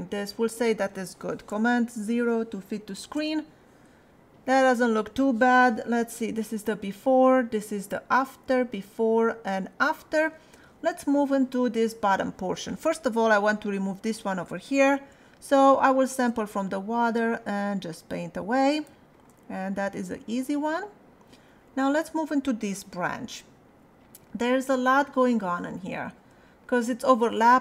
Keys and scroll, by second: 3.0 super+0, 8.4 \, 26.3 space.